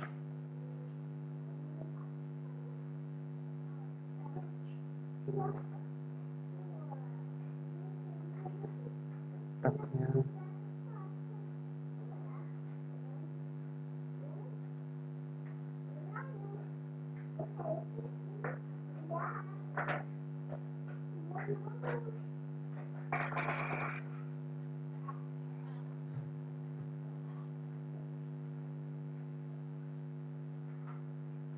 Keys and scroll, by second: 3.9 ctrl+a.